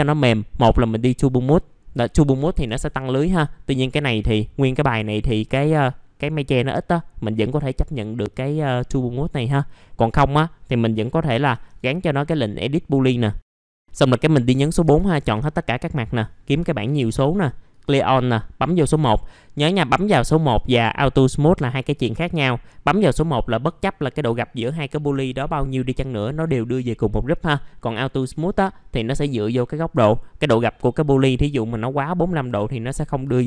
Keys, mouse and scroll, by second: 0.6 click, 1.7 scroll down 1, 2.0 alt+middle click, 2.6 F4, 3.3-3.8 scroll up 1, 3.8 click, 4.2 F4, 5.3 click, 8.3 right click, 9.2 click, 9.9 middle click, 11.5 ctrl+g, 15.9 click, 16.6-17.2 scroll down 1, 17.7-19.8 drag.